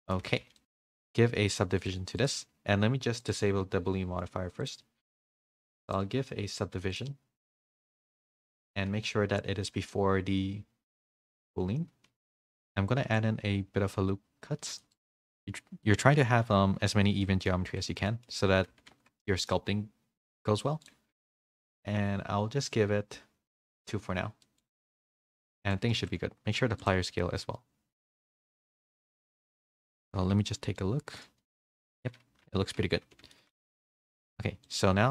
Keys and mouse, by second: 0.3 a, 0.5 middle click, 0.6 alt+h, 0.6 a, 1.8-3.3 drag, 4.6-7.8 drag, 9.3-11.4 drag, 12.3 middle click, 12.6 Tab, 13.0 ctrl+r, 17.2 middle click, 17.6 Tab, 18.0 middle click, 18.7 a, 18.9 a, 20.2-20.6 middle drag, 20.8-21.9 drag, 23.7 click, 24.4 middle click, 25.2 middle click, 25.9 ctrl+a, 27.4-28.1 middle drag, 28.1 a, 28.3 a, 28.8-30.5 drag, 30.5 /, 30.7-31.1 middle drag, 32.4 /, 33.1 s.